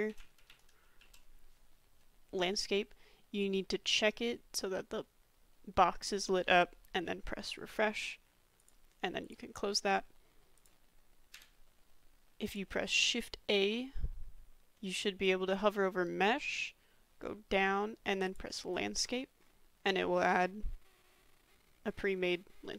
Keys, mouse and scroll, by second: 11.3 Delete, 12.5 click, 13.0 shift+a, 20.1 middle drag, 20.2-22.7 drag, 21.5 a.